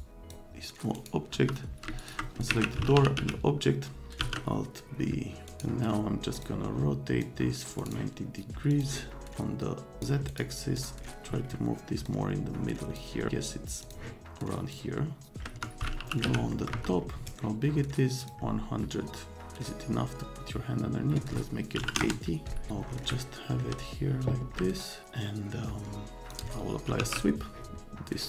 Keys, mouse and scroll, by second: 0.9 right click, 1.3 F3, 1.9 click, 2.2-4.2 typing, 5.5 click, 6.3 middle click, 7.2 middle click, 7.8 click, 7.8 right click, 8.7 click, 9.3 click, 10.3 right click, 10.7 click, 12.1 click, 13.8 click, 14.7 click, 15.4 middle click, 15.5 F3, 15.9 r, 16.2 z, 16.5 middle click, 16.7 F3, 18.2 click, 21.8 KP_8, 21.8 KP_0, 22.0 KP_Enter, 23.1 middle click, 24.6 middle click, 24.7 right click, 26.2 click, 26.6-27.5 typing.